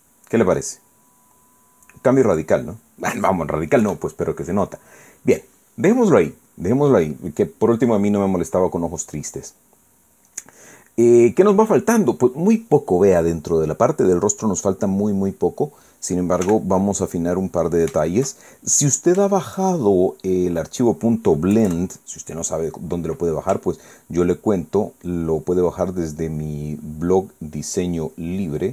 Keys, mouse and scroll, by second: 4.8 KP_1, 8.7 click, 16.3 click, 17.4 f, 18.3 click, 19.2-20.2 shift+middle drag, 20.4 shift+middle click, 21.3 shift+middle click, 22.5 KP_Add, 23.1 middle click, 25.1 ctrl+click, 25.5 ctrl+middle click, 25.7 ctrl+click, 26.1 ctrl+middle click, 26.2 ctrl+click, 28.3 ctrl+click.